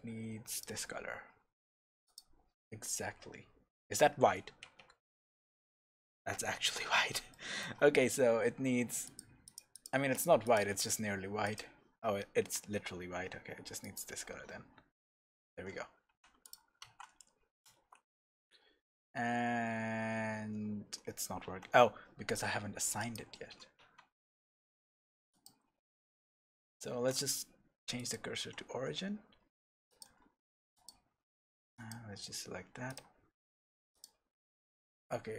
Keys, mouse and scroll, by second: 4.8 scroll up 1, 5.3-9.0 shift+middle drag, 6.9-7.3 scroll up 1, 9.0 click, 9.7 click, 10.4 click, 14.7-15.4 scroll down 1, 16.1 Tab, 16.4 drag, 16.9 shift+z, 17.9 a, 18.3-20.3 scroll up 2, 21.5 Tab, 23.1 click, 23.9 Tab, 24.3 scroll down 2, 25.3 click, 26.9 shift+s, 29.9 click, 30.7 click, 31.7 click, 32.9 click, 33.9 click.